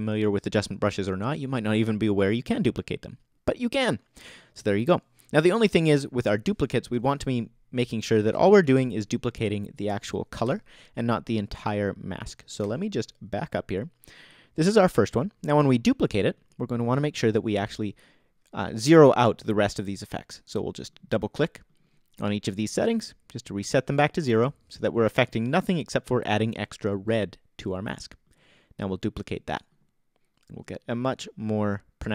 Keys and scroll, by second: 6.9 BackSpace, 8.7 BackSpace, 10.4 BackSpace, 12.6 BackSpace.